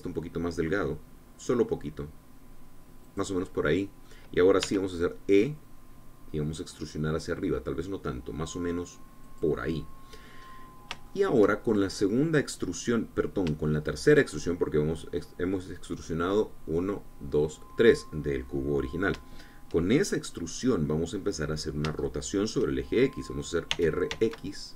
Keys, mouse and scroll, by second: 3.8-4.9 drag, 5.4 e, 10.0 click, 11.2-12.3 drag, 12.5 shift+click, 13.2-14.2 drag, 14.4 shift+click, 22.0-23.8 drag, 24.4 r.